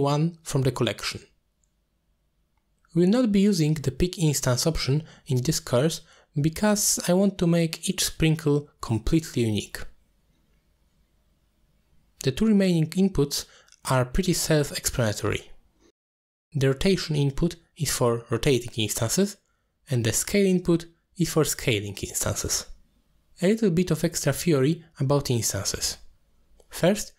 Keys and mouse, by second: 0.5-1.2 drag, 2.2 click, 4.0-5.2 middle drag, 5.4 click, 6.3 click, 10.9 click, 16.7-18.0 drag, 18.5 click, 20.0-23.7 drag, 25.6 middle click.